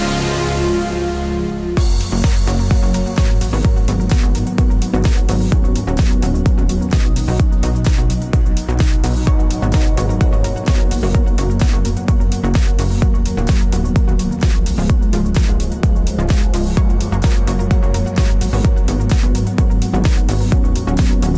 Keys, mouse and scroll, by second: 1.2 Tab, 1.6 alt+click, 1.8 2, 1.9 alt+click, 2.2 middle click, 2.4 scroll up 1, 2.7-6.6 middle drag, 2.7 ctrl+click, 6.1 shift+d, 6.2 Return, 6.6 Tab, 6.9 click, 7.9-9.9 drag, 8.0 Tab, 8.3 a, 10.0 Tab, 10.4 click, 10.5 middle click, 10.6-13.9 scroll down 1, 13.9 middle click, 14.3 scroll up 1, 14.7 click, 15.1 Tab, 15.6-21.3 shift+middle drag, 18.0 g, 20.4 click.